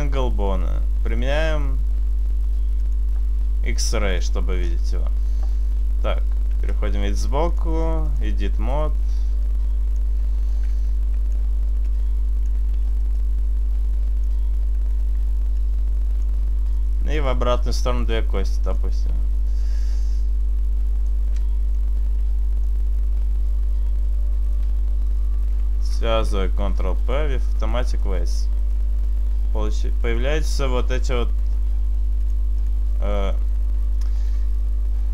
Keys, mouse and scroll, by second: 1.3 scroll down 1, 2.9 click, 3.9 click, 4.3 click, 4.7-5.8 scroll up 2, 5.8-6.5 scroll up 1, 6.5 KP_3, 7.5 click, 9.1 right click, 9.5 click, 10.9 click, 11.9 click, 12.6 e, 13.1 right click, 13.9 click, 15.0 shift+right click, 15.5 click, 16.8 right click, 17.3 e, 17.6 right click, 17.6 click, 19.3 e, 19.7 right click, 19.7 click, 21.8 middle click, 22.4 Tab, 24.4 right click, 25.1 shift+right click, 25.8 ctrl+p, 27.9 right click, 28.7 right click, 32.0 click.